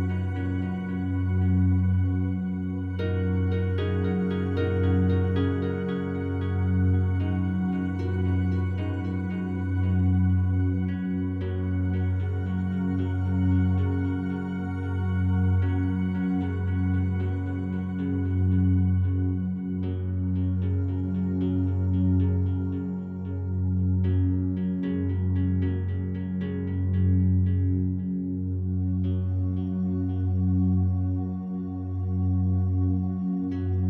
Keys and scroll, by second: 1.0 ., 1.3 Return, 17.2 ctrl+7.